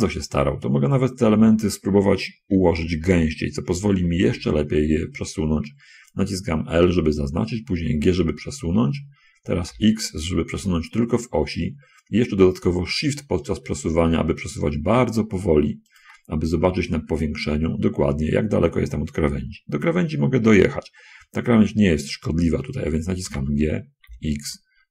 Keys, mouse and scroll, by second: 2.9 l, 4.6 g, 10.1 x, 16.2 shift+click, 16.9 middle click, 17.1 middle click, 18.0 middle click, 23.6 g, 24.3 shift+x.